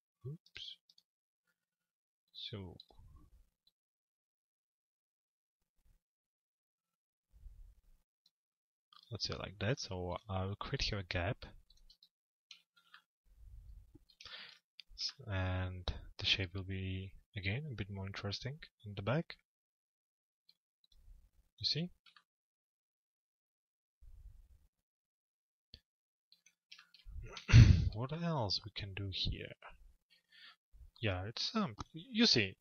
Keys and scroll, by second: 11.6 F4.